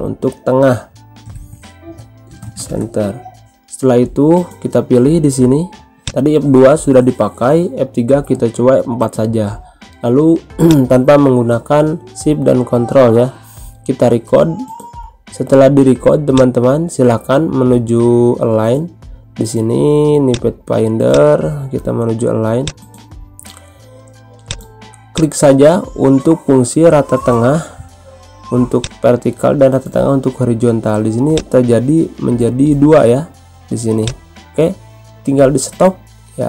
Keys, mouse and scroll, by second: 0.2-1.6 typing, 2.8-4.7 typing, 5.9 click, 10.6 click, 16.3 click, 20.2-28.7 drag, 31.3 click, 34.0-36.4 drag.